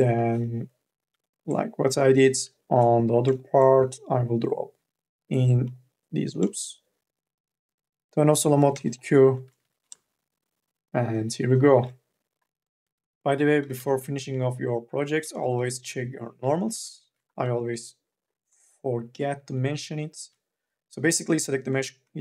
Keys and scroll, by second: 0.0 l, 8.2 q, 9.4 n, 12.9 q, 13.4 3, 13.7 e, 15.2 3, 17.1 ctrl+a, 20.4 ctrl+a, 21.9 ctrl+a.